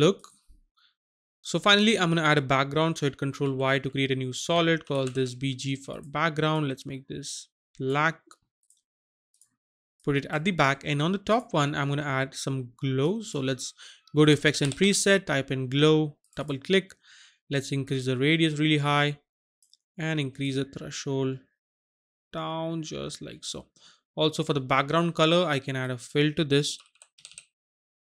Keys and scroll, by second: 3.4 ctrl+y, 4.8 shift+b, 5.0 g, 14.4-14.7 typing, 26.8-27.3 typing.